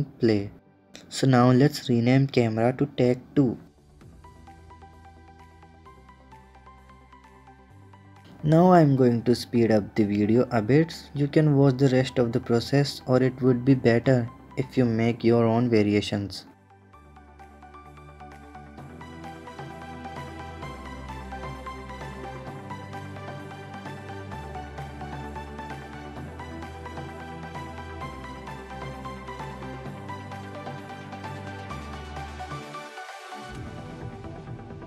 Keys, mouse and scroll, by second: 1.3 click, 1.8-3.8 drag, 4.7-5.9 drag, 6.6 s, 7.3 click, 7.6 s, 10.1-13.1 drag, 18.1 click, 18.4 middle click, 18.7 click, 19.2 shift+d, 20.1 r, 21.1 alt+h, 21.3 scroll up 5, 21.5 middle drag, 21.8 click, 22.0 scroll down 1, 22.1-22.4 middle drag, 22.4 click, 22.6 click, 22.9 shift+a, 23.6 alt+g, 23.7 alt+r, 24.1 click, 24.3-27.0 drag, 27.5 ctrl+KP_0, 28.0 click, 28.9 r, 29.5 KP_0, 29.8 click, 30.0 click, 30.2 KP_0, 30.5 s, 31.4 click, 32.1 s, 32.7-33.4 drag, 33.4 s, 34.0-34.8 drag.